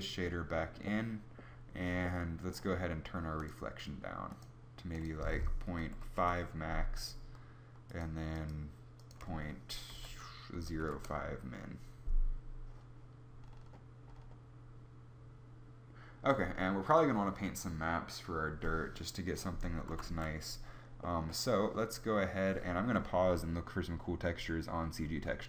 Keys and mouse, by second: 19.7 z, 19.8 z.